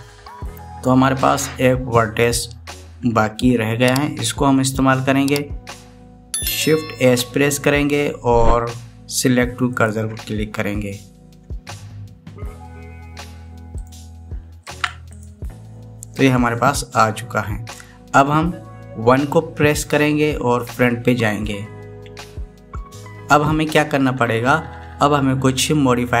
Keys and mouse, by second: 2.0 click, 2.4 click, 8.1 shift+s, 13.3 shift+s, 21.1 KP_1.